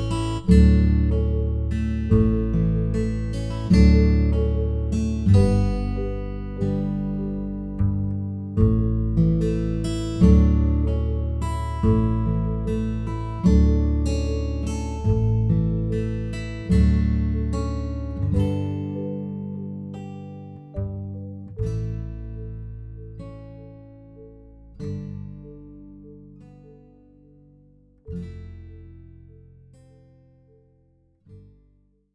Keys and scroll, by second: 1.4 b, 4.2 F7, 5.7 End, 6.1 Page_Up, 12.8 typing, 14.5 +, 15.8 ctrl+s.